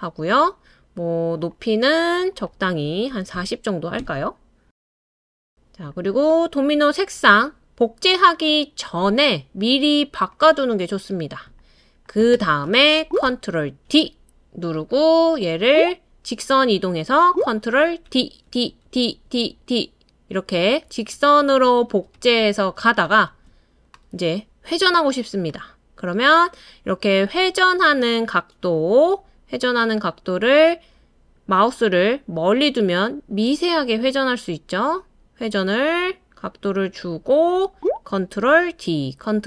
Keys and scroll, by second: 2.9-3.8 typing, 4.0 Return, 13.9 super+d, 18.1 super+d, 18.5 super+d, 18.9 super+d, 38.7 super+d.